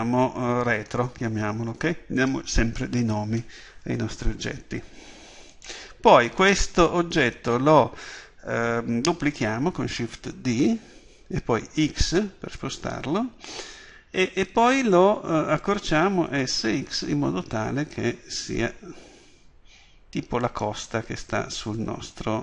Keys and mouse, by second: 5.5-8.0 right drag, 10.5 shift+d, 14.9-16.9 drag, 20.6-22.4 drag.